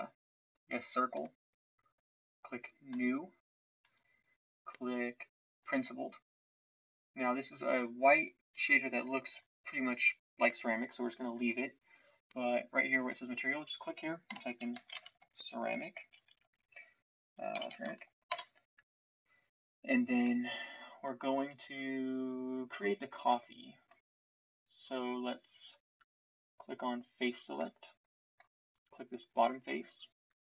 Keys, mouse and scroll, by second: 23.0 Tab, 29.4-30.4 drag.